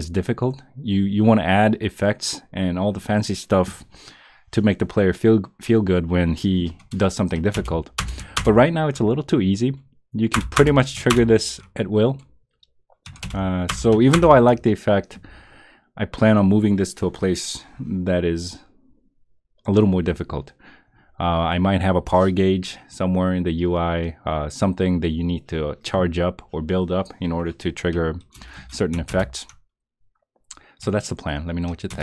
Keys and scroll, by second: 7.5 Return, 8.3 Return, 10.3 Return, 11.1 Return, 13.2 Return, 14.1 Return, 28.3 Return, 29.1 Return, 31.9 Return.